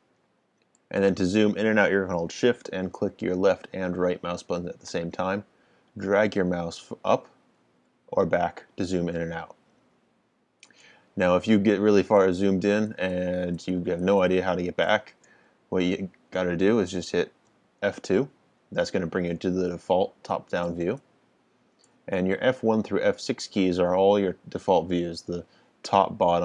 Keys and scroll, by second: 17.9 F2.